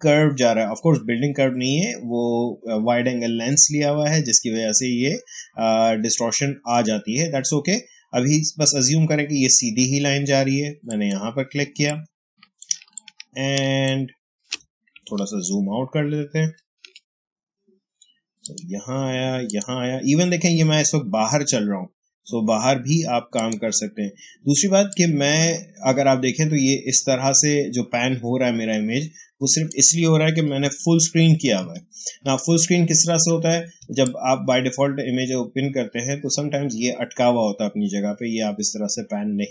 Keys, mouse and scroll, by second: 10.7 click, 11.5 space, 11.8 click, 12.0 space, 12.8-15.6 ctrl+drag, 15.6 ctrl+-, 18.3 click, 23.3 click, 24.5 space, 24.8 click, 25.0 space, 30.5 f, 31.5 f, 32.3 f, 33.7 space, 33.9 click, 34.2 space.